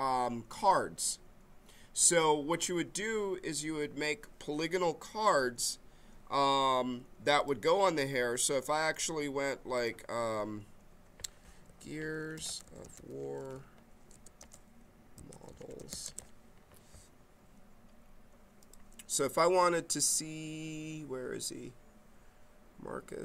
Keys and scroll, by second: 11.4-16.4 typing.